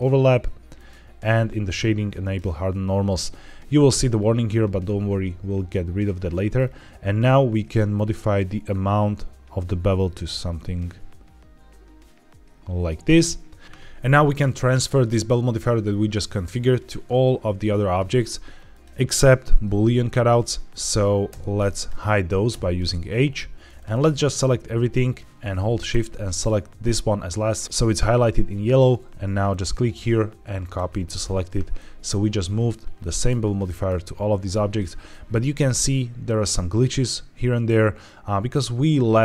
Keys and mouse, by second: 0.6 click, 2.1 click, 7.8-12.9 shift+middle drag, 13.6 ctrl+z, 21.2 h, 22.4 h, 23.9-24.2 drag, 29.4-30.7 drag, 31.6-32.0 middle drag, 32.9 middle drag, 33.5 shift+middle drag, 35.2 shift+middle click.